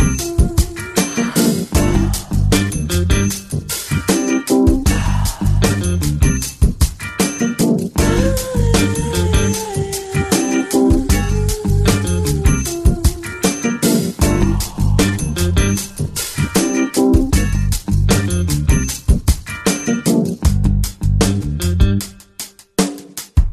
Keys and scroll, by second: 0.0-0.5 typing, 4.2 space, 8.1 space, 9.9 space, 11.6-14.3 typing, 15.9 space, 19.3 space, 19.9 space, 20.9-23.5 typing.